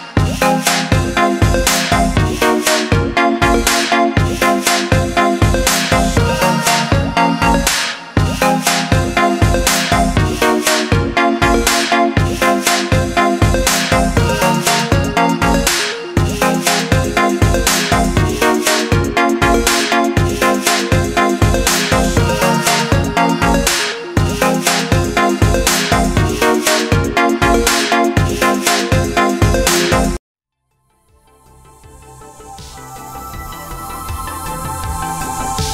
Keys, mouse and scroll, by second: 3.4 click, 5.3 alt+scroll up 1, 6.0 alt+scroll up 1, 7.7 click, 10.6 alt+scroll down 1, 11.2 alt+scroll up 1, 12.8-13.3 alt+scroll down 2, 14.4 click, 15.0-15.4 scroll up 2, 16.3 shift+click, 17.5 click, 18.0 alt+scroll down 1, 18.6 alt+scroll up 2, 19.6 click, 20.7 shift+click, 22.5 click, 23.2-24.0 alt+scroll down 3, 24.9 click, 25.7-26.9 scroll up 4, 27.8 click, 31.6 click.